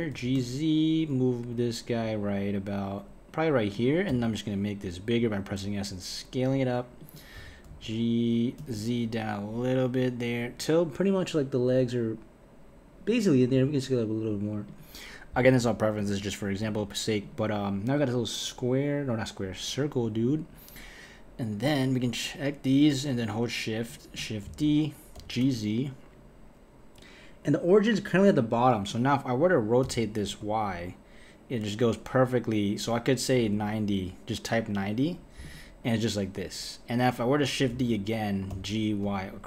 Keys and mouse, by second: 0.1 g, 4.1 s, 7.3 g, 13.5 s, 15.4-16.6 right drag, 16.6 s, 17.2 click, 20.1 KP_1, 21.6 click, 23.0 shift+click, 24.5 shift+d, 29.8 r, 37.7 shift+d.